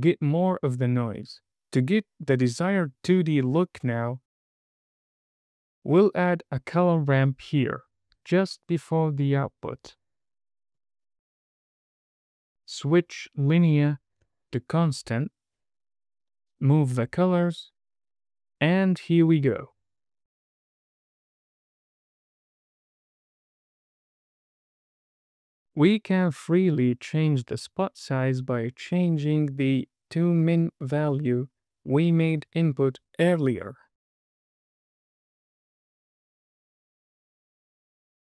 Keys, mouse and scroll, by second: 1.3-2.1 scroll down 3, 2.2 middle click, 3.1-3.7 scroll down 2, 3.7 middle click, 4.6 click, 5.9 shift+a, 8.6 r, 11.9 click, 12.4-12.9 scroll up 3, 12.9 middle click, 13.8-16.2 drag, 17.2-20.7 drag, 21.0-22.5 drag, 22.8 click, 24.4 space, 25.8 space, 26.6-28.0 drag, 28.4 space, 30.3 space, 30.7-32.2 drag, 34.7 space, 35.3 click, 36.2 space, 37.3 space, 37.6-38.3 drag.